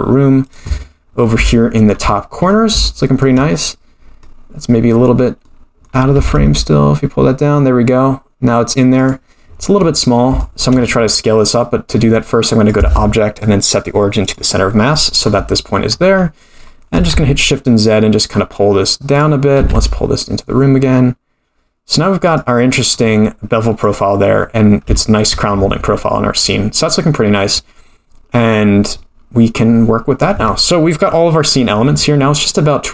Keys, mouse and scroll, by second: 1.1 scroll up 4, 1.5-1.9 shift+middle drag, 2.4-2.8 scroll up 3, 2.8 shift+middle click, 4.2-5.8 middle drag, 6.1 g, 9.4-10.4 scroll down 10, 10.4 shift+middle click, 10.9-11.3 scroll down 2, 11.5-12.7 middle drag, 12.7-14.3 drag, 14.9-15.7 middle drag, 15.9-16.9 scroll up 4, 16.9 s, 19.6 g, 22.9-23.4 scroll up 5, 23.8 click, 24.3-24.8 scroll down 4, 25.0 shift+middle drag, 26.4-26.9 scroll down 2.